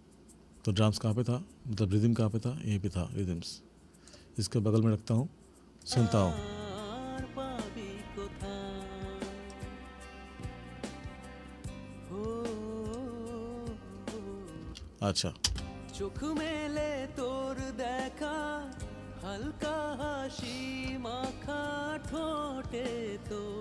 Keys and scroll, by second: 14.7 space.